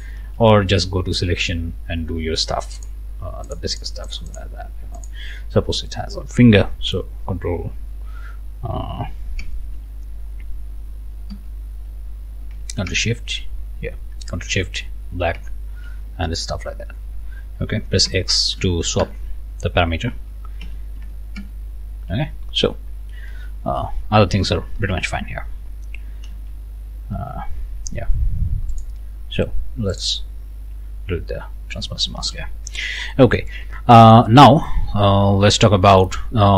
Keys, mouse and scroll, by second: 0.2 ctrl+z, 2.8 click, 3.5 click, 4.1 click, 5.0 click, 6.9 ctrl+BackSpace, 9.4 ctrl+BackSpace, 11.3 alt+BackSpace, 12.9 ctrl+shift+BackSpace, 15.4 ctrl+shift+BackSpace, 18.0 x, 19.0 ctrl+shift+BackSpace, 20.6 ctrl+x, 21.4 ctrl+shift+BackSpace, 23.3 ctrl+z, 24.8 ctrl+shift+a, 25.1 scroll down 2, 25.7 scroll up 1, 26.3 ctrl+z, 27.1 ctrl+z, 28.7 click, 29.9 click, 32.2 ctrl+shift+a, 32.6 ctrl+shift+scroll down 2, 33.1 middle click, 33.6 scroll up 2, 33.9 middle click, 34.5 scroll down 2, 35.4 scroll up 2, 35.8 middle click.